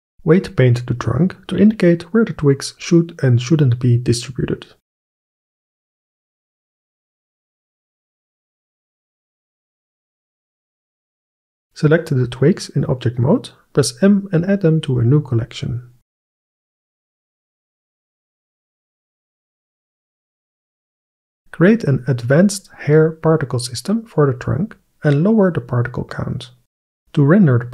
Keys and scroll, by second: 7.1 KP_1, 13.9 m, 15.8 shift+t, 16.1 w, 16.2 i, 16.4 g, 17.2 Return, 25.2 KP_5, 25.4 KP_0, 25.5 Return.